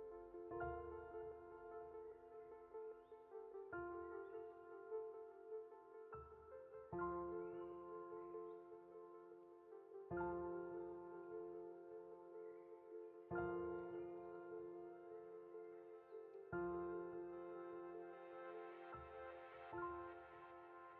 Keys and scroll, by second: 5.8 Left, 6.9 Up, 7.2 Right, 7.9 Up, 13.6 Left.